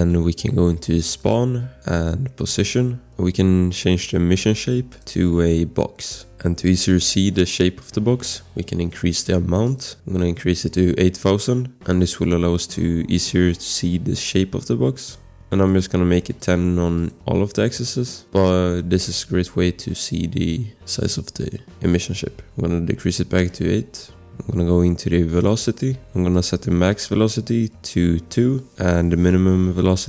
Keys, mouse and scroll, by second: 3.3 scroll, 6.2 scroll, 6.4 click, 8.0 scroll, 9.5 click, 9.5 scroll, 9.7 click, 10.5 0, 11.2 Return, 12.4 click, 13.2 click, 13.3 click, 14.7-15.5 typing, 15.4 scroll, 15.7 click, 16.1 ctrl+c, 16.6 ctrl+v, 18.3 scroll, 18.5 click, 23.4 click, 25.7 scroll, 28.2 2, 28.3 Return.